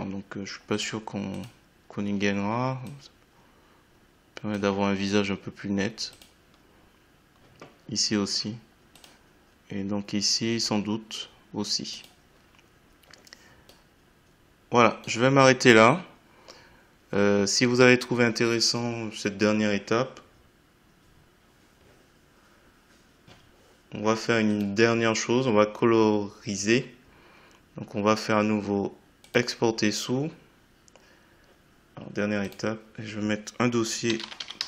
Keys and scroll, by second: 34.1 c.